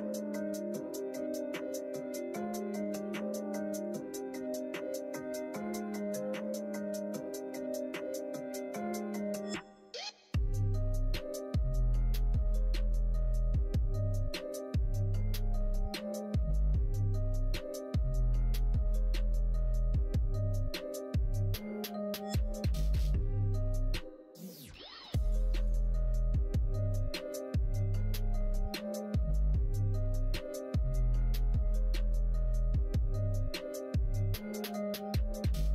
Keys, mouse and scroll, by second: 1.0 middle click, 2.8 click, 3.7 click, 4.2 middle click, 4.6 middle click, 5.1 middle click, 5.8 alt+z, 6.3 middle click, 6.8 2, 7.3 click, 8.0 click, 8.7 middle click, 9.3 middle click, 11.1 middle click, 13.9 shift+click, 14.9 middle click, 16.4 shift+click, 17.8 shift+click, 20.2 middle click, 21.1-22.1 middle drag, 28.9-30.5 middle drag, 32.2 middle click, 32.8 middle click, 33.7 shift+click, 34.7-35.7 middle drag.